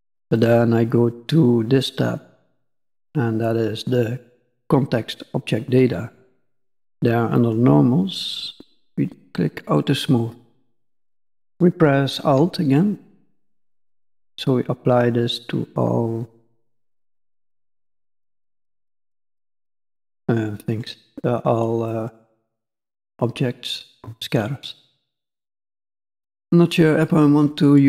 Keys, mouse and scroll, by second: 0.3 click, 7.3 click, 7.7-9.1 scroll down 7, 9.1 click, 12.7 alt+click, 19.6 middle click, 21.8 middle click, 25.3 click, 27.0 click.